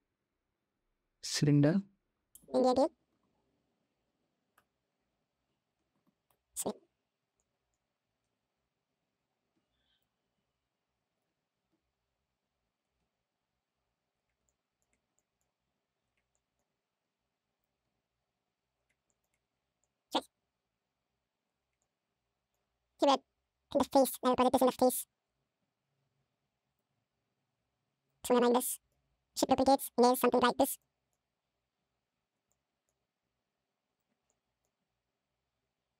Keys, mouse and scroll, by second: 2.3 r, 4.7 ctrl+z, 4.8 ctrl+z, 5.2 r, 7.2 middle drag, 8.8 g, 10.1 s, 11.2 ctrl+z, 11.3 s, 12.8 s, 14.3 click, 15.0 shift+middle drag, 15.5 g, 16.2 click, 16.9 s, 17.6 g, 18.9 shift+drag, 19.6 click, 20.1 g, 21.6-22.3 drag, 22.8-23.8 drag, 24.0-24.7 drag, 24.7 g, 25.4 g, 27.1 g, 28.2-28.7 drag, 29.1 shift+d, 30.6 drag, 31.6 g, 32.3-32.7 drag, 33.0 g, 34.1 drag.